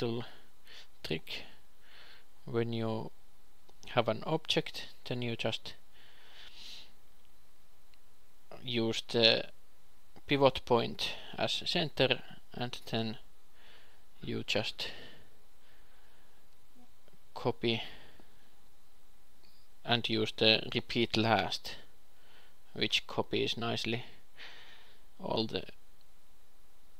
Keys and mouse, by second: 0.0 a, 0.3 q, 1.1 p, 2.2 Tab, 2.9 click, 3.2 shift+s, 5.4 Tab, 7.6 a, 8.0 s, 9.6 s, 11.8 shift+d, 11.8 x, 12.5 ., 13.5 q, 14.3 shift+d, 20.6-23.6 ctrl+alt+shift+r, 23.6 Tab, 25.4 s, 26.7 a.